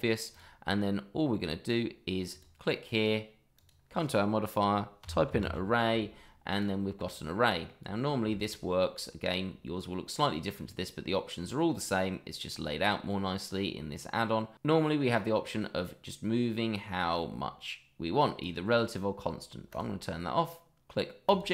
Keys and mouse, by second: 0.3 click, 1.3 middle click, 2.3 click, 3.6-6.6 drag, 5.4 r, 7.2-7.7 middle drag, 8.3 shift+middle drag, 15.1-18.4 drag, 19.7 click, 21.2 click.